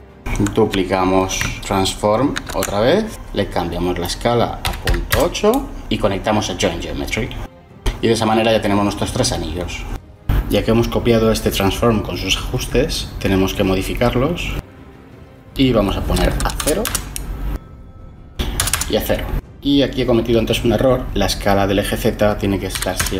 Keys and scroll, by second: 0.9 ctrl+shift+d, 4.8-5.5 typing, 16.6 0, 16.8 Return, 18.6 0, 18.7 Return, 22.7 1, 22.9 Return.